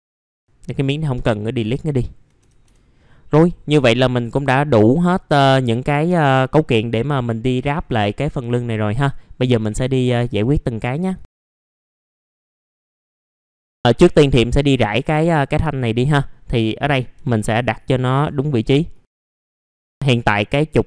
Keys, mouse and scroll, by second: 0.0-0.3 scroll down 1, 0.3 click, 1.0 Delete, 1.6 click, 2.0 alt+middle click, 2.9 scroll down 1, 3.4 middle click, 3.6 scroll down 1, 7.8 middle click, 8.0-8.9 scroll down 1, 8.9 middle click, 9.1-9.6 scroll down 1, 9.6 F3, 10.3-11.1 scroll down 2, 10.7 middle click, 11.1 click, 11.7 middle click, 11.9 Delete, 11.9-12.6 scroll up 1, 12.6 click, 12.7 middle click, 12.8 scroll down 1, 13.1 click, 13.5 click, 13.6 middle click, 14.0-14.5 scroll up 1, 14.5 click, 16.7 middle click, 18.1 F4, 18.5-18.9 scroll up 1, 18.9 click, 19.3-19.8 scroll up 1, 19.8 middle click, 20.0 scroll down 1.